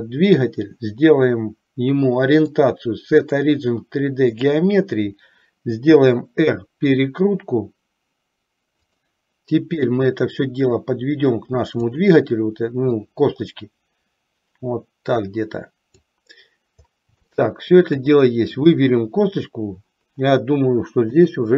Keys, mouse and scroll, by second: 2.6-4.7 drag, 5.9 r, 10.0-12.1 drag, 13.2-16.4 drag, 17.6 shift+middle click, 18.8 click, 21.2 KP_7.